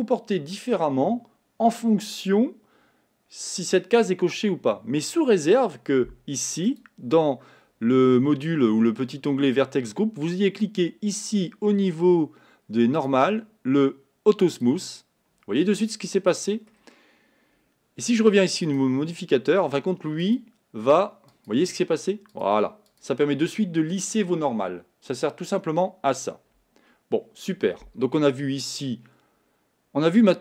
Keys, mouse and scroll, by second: 14.7 click, 16.0-20.3 middle drag, 20.3 click, 21.3-22.4 drag, 22.9 click.